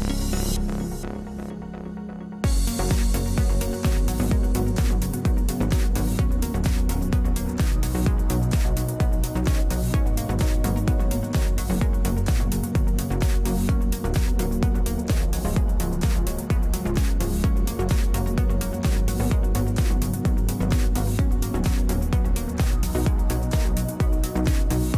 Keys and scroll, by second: 2.0 g, 7.0 Return, 12.7 g, 18.2 Return.